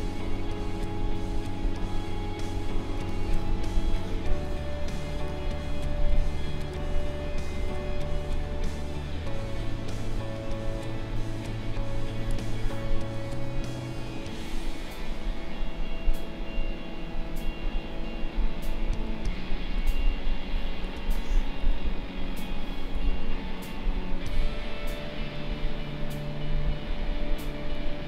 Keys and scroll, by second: 3.0 space, 12.3 space, 20.9 space.